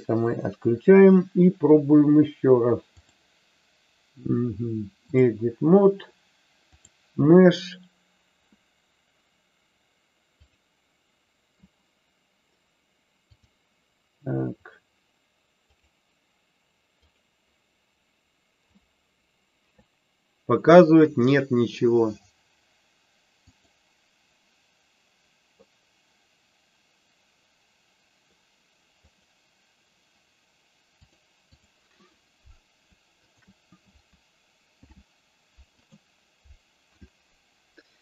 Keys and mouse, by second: 2.9-5.3 drag, 6.9-10.5 drag, 13.3-17.1 drag, 23.6-29.2 drag, 31.1 click, 33.1 shift+click, 34.6 ctrl+p.